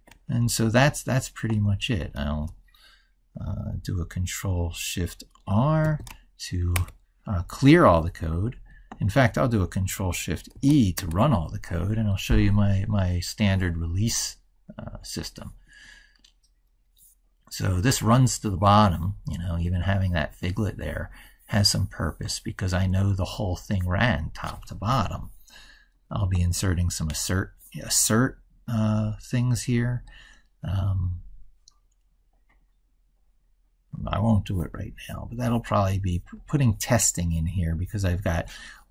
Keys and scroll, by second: 0.0 ctrl+s, 5.7 ctrl+shift+r, 10.6 ctrl+shift+e.